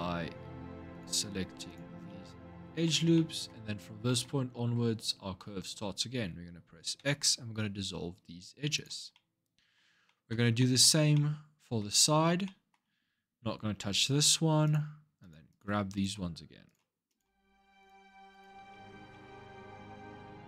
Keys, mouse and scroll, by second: 0.7 alt+shift+click, 1.5 alt+shift+click, 1.9-3.6 middle drag, 3.6 scroll up 1, 3.8-6.8 middle drag, 6.8 x, 8.9-14.4 middle drag, 14.4 click, 15.0 alt+shift+click, 15.3 alt+shift+click, 15.8 alt+shift+click, 16.4 alt+shift+click, 16.9 alt+shift+click, 17.6 alt+shift+click, 18.1 alt+shift+click, 18.5-20.2 middle drag, 20.2 alt+shift+click.